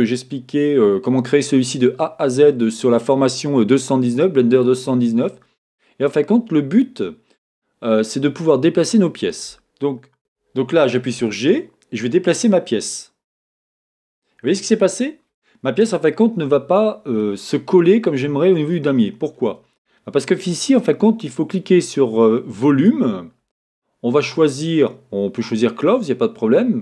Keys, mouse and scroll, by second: 11.2 g, 13.7 click, 14.0-20.6 middle drag, 20.6-26.8 drag.